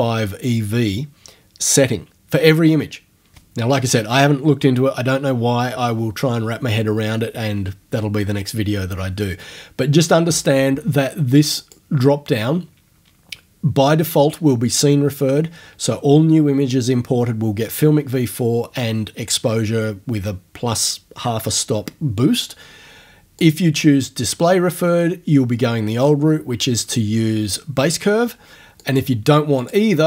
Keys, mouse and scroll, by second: 11.6 click, 23.4 click, 28.9 click, 29.6 click.